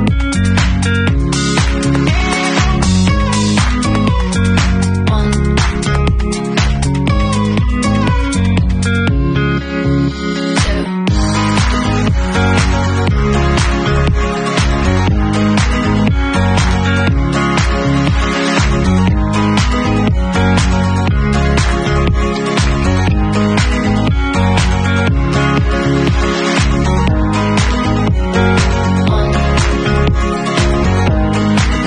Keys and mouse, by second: 1.3 click, 1.4-2.2 middle drag, 2.2 click, 2.3-3.3 middle drag, 3.3 click, 4.6-13.0 drag, 11.4 ctrl+z, 11.7 ctrl+z, 13.0-13.6 middle drag, 13.6 click, 13.6 middle click, 14.1-25.2 drag, 20.4 ctrl+e, 25.2 middle click, 25.7 w, 26.2-31.2 alt+drag, 30.9 Tab, 31.2 alt+middle drag, 31.4-31.8 alt+drag.